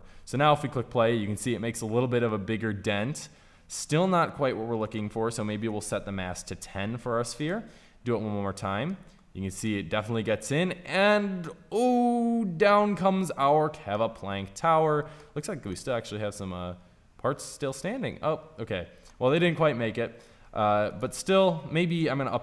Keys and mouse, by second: 0.0-2.2 drag, 5.5-7.2 drag, 8.3-9.5 drag, 9.5-12.6 middle drag, 14.4-17.3 middle drag, 18.8-22.4 middle drag.